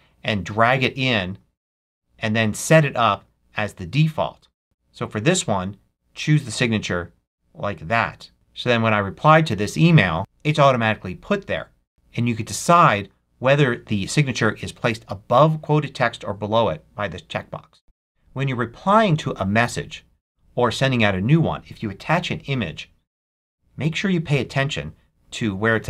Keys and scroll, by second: 17.8 alt+super+2.